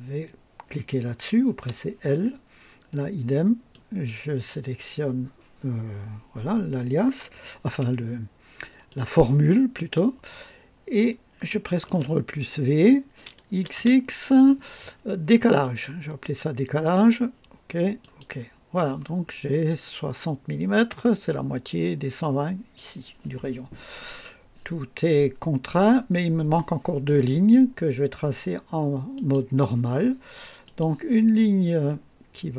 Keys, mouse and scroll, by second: 1.6 typing, 3.7 click, 8.9-10.1 drag, 11.8 ctrl+v, 13.5 x, 15.6 click, 16.7 click, 18.0 click, 29.1 click, 30.6 click.